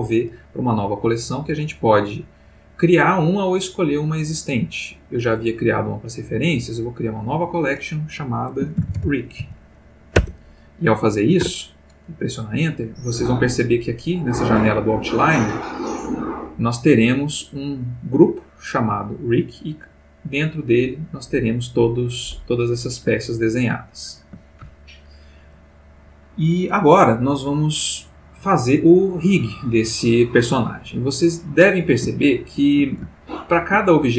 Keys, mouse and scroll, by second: 7.3 click, 8.8 shift+r, 8.9 shift+i, 9.0 shift+c, 9.4 shift+k, 10.2 Return, 11.4 Return, 13.4-14.2 middle drag, 15.1 middle click, 16.2 click, 18.9 click, 19.6 middle click, 20.7 middle click, 21.3 middle click, 23.2-24.4 ctrl+middle drag, 32.1-33.0 shift+middle drag, 33.1-33.9 ctrl+shift+middle drag.